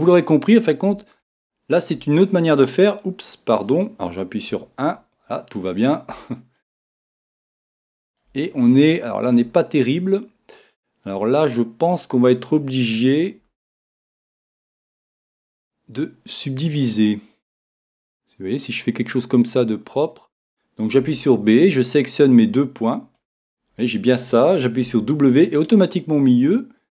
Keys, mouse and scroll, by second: 4.5 KP_1, 5.3-14.3 middle drag, 14.3-15.5 right drag, 14.3 g, 15.6 click, 17.4-19.3 right drag, 21.0 b, 24.9 w.